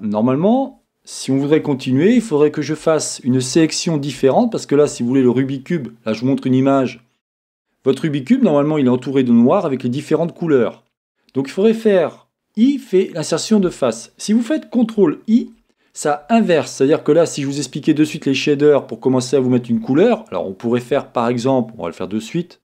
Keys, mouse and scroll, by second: 17.9 ctrl+i.